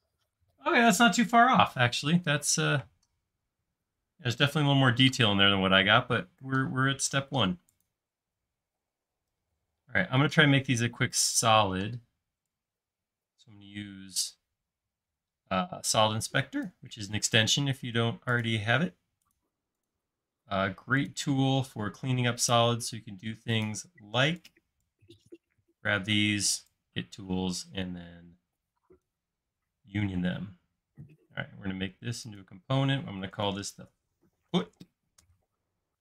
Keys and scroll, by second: 0.8 typing, 33.7-35.0 typing, 35.2 Return.